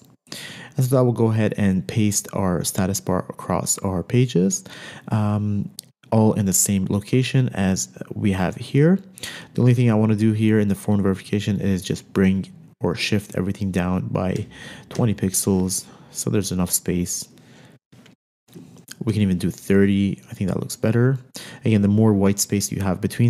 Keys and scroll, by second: 14.8 shift+Page_Down, 15.4 shift+Down, 19.5 shift+Page_Down.